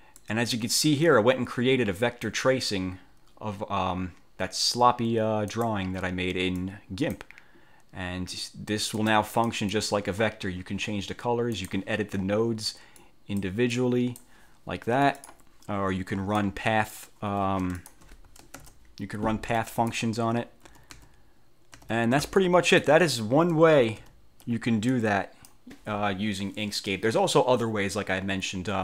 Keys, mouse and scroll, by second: 0.3-2.6 drag, 5.6 click, 6.8 click, 9.1 click, 11.7 click, 13.2 click, 13.9 click, 15.0 F1, 15.3 click, 16.2 F4, 16.5 click, 17.4 F1, 17.9 shift+click, 18.7 ctrl+shift+-, 20.8 ctrl+z, 21.9 ctrl+z, 22.5 click, 23.9 ctrl+z, 25.0 click.